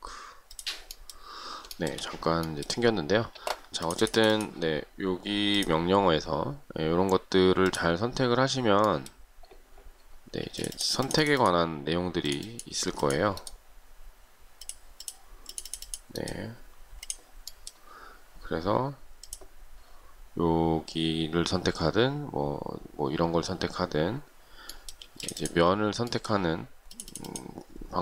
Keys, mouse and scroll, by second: 2.0 shift+middle click, 10.7 space, 25.3 space.